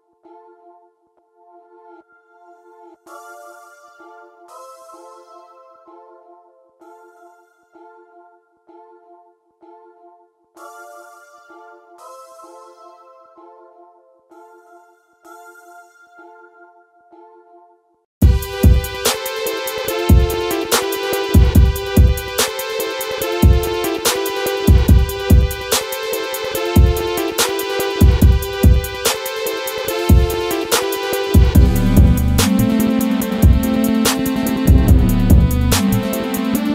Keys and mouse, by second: 1.5-3.4 middle drag, 4.4 Tab, 7.1 ctrl+r, 10.1 ctrl+r, 12.5 click, 13.0 ctrl+r, 14.3 click, 14.8 ctrl+r, 16.9-18.3 drag, 21.5 ctrl+r, 23.2-24.5 drag, 24.9-26.2 drag, 27.1 click, 27.7 middle click, 28.6 click, 29.6 middle drag, 35.1-36.7 drag.